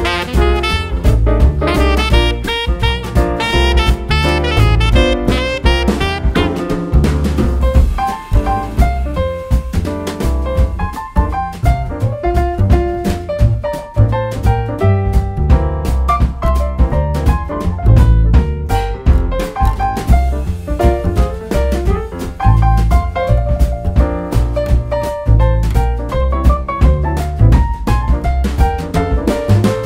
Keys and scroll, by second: 24.0 super+z.